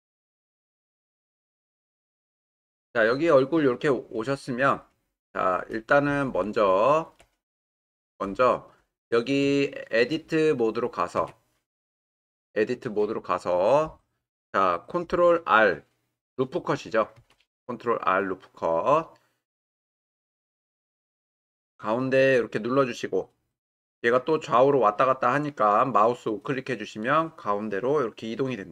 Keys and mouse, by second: 0.0-1.5 ctrl+drag, 5.1-6.5 middle drag, 7.2 middle click, 8.6-9.2 ctrl+middle drag, 9.6-10.1 shift+middle drag, 11.3 Tab, 17.2 ctrl+r, 27.0-27.7 right drag.